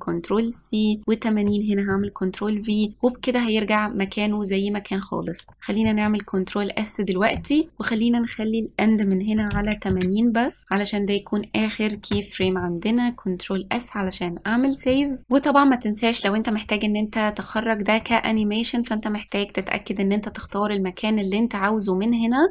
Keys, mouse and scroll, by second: 0.7-2.0 drag, 2.0 ctrl+v, 6.0 ctrl+s, 8.0-10.6 drag, 12.6 ctrl+s, 19.7-22.5 drag.